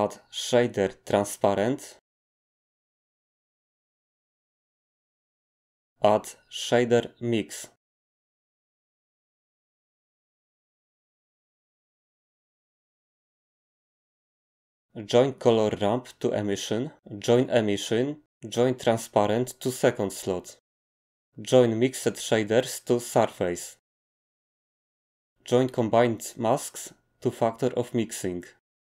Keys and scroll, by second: 0.0 a, 6.5 a.